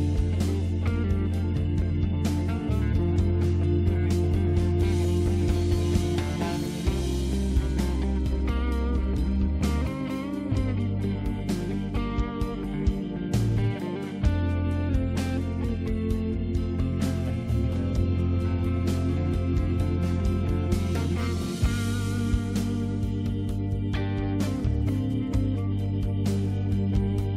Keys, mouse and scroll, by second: 0.2 click, 0.9 scroll up 2, 1.0-1.4 scroll down 3, 1.6 click, 2.0 click, 2.4 click, 2.7 click, 3.2 click, 3.3 scroll up 2, 3.6 click, 4.0-4.8 scroll down 4, 4.8 click, 5.2 click, 5.4 click, 5.8 click, 6.0 click, 6.8-8.2 scroll down 2, 8.2 scroll up 1, 8.7-9.4 scroll up 1, 9.6-10.0 scroll down 1, 10.3 m, 11.4 scroll up 1, 11.5 scroll down 2, 12.0 click, 12.1 click, 12.2-15.2 typing, 12.7 click, 12.8 click, 16.0 Return, 16.9 right click, 16.9 click, 17.8 click, 18.8 click, 21.2 Right, 21.7 Right, 22.6 space, 22.9 click, 24.3 click, 25.3 click.